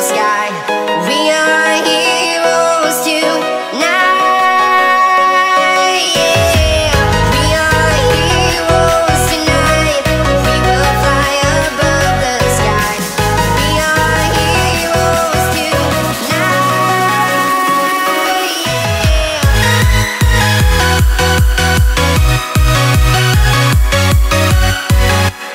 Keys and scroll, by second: 1.7 ctrl+z, 4.0 ctrl+z, 5.6 space, 7.0 ctrl+z, 7.4 space, 8.2 z, 8.5 space, 9.7 space, 11.2 space, 11.5 space, 12.1 space, 12.3-13.0 space, 13.3 ctrl+z, 14.0 ctrl+z, 14.4 space, 14.6 ctrl+z, 16.4 z, 16.5-19.5 z, 19.6 ctrl+Return, 23.4 typing, 23.7 Return.